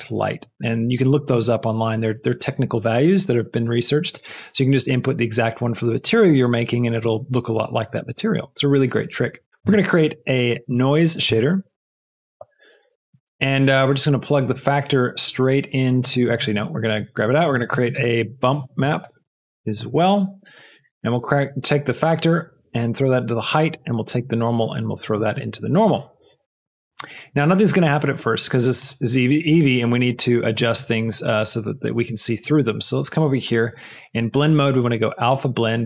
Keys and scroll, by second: 9.5 x, 9.5 i, 9.7 shift+a, 11.3 n, 11.7 i, 11.9 e, 12.4 Return, 17.0 g, 17.6 shift+a, 18.8 b, 19.0 u, 19.2 m, 19.8 Return.